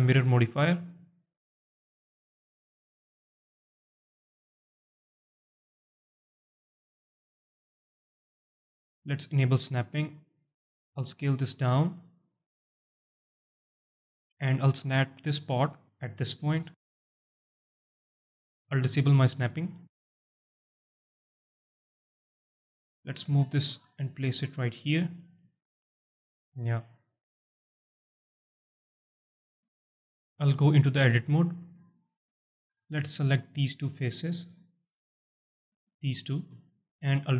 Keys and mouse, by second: 1.6-4.3 drag, 5.0 click, 5.7 click, 6.4-8.0 alt+drag, 8.2 Tab, 8.6 alt+drag, 10.2 click, 10.9 middle click, 11.3 s, 12.1 click, 12.4 middle drag, 12.5-13.2 alt+drag, 14.5 alt+shift+drag, 15.0 alt+drag, 15.8 g, 16.3 z, 16.7 click, 17.6 alt+drag, 19.6 click, 20.4 alt+click, 20.9-21.3 alt+drag, 21.8 KP_7, 22.5 alt+shift+drag, 23.1 g, 25.2 click, 25.7-26.2 alt+drag, 26.7-29.5 alt+drag, 29.8 alt+shift+drag, 30.5 Tab, 31.8 middle click, 32.7 3, 33.4 shift+click, 33.8 shift+click, 35.3 click, 36.6 alt+click, 37.0 x.